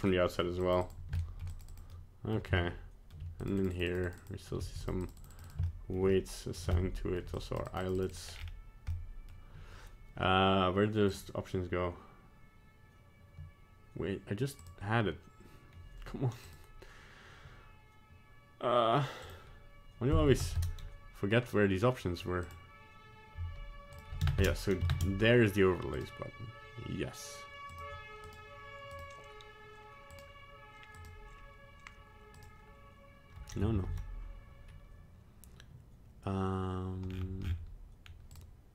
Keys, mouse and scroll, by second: 0.0 scroll up 1, 0.6 middle click, 1.1 click, 1.5 shift+middle click, 1.8 shift+middle click, 1.9 click, 2.5 middle click, 3.4 shift+middle click, 4.6 click, 5.0 f, 5.6 click, 6.1 shift+middle click, 6.7 middle click, 7.3 shift+middle click, 8.2 click, 8.9-10.0 scroll down 5, 20.5 ctrl+space, 22.4 click, 24.9 ctrl+space, 25.9 click, 28.2 click, 30.1 click, 32.3 click, 33.8 ctrl+z, 37.0-38.3 scroll down 13, 38.3 click.